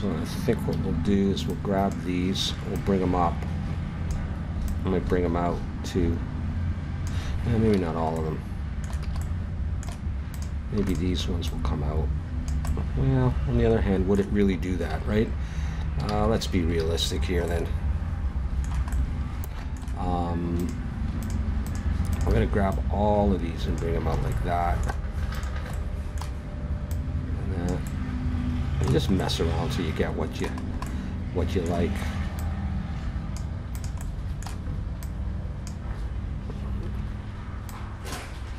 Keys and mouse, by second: 0.7 a, 1.3 b, 2.7-4.1 drag, 7.7 ctrl+z, 9.0 a, 10.3 right click, 10.9-13.4 drag, 13.4 middle click, 14.8 ctrl+z, 16.1 ctrl+z, 16.8 ctrl+z, 20.5-23.9 right drag, 24.0 right click, 24.1 a, 24.3 click, 25.3-28.1 right drag, 28.5 click, 28.9-32.4 middle drag, 32.4-33.7 drag, 34.7-36.9 drag, 37.7-38.5 drag.